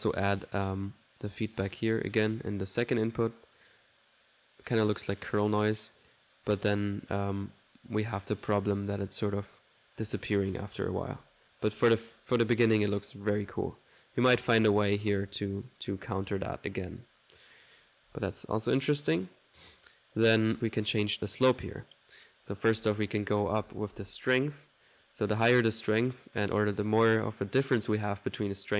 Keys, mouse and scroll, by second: 2.2 1, 7.5 click, 7.8 typing, 11.6 typing, 17.0 right click, 17.0 typing, 17.7 click, 18.1 typing, 18.3 middle click, 18.8 click, 20.1 middle click, 20.5 click, 22.0 click.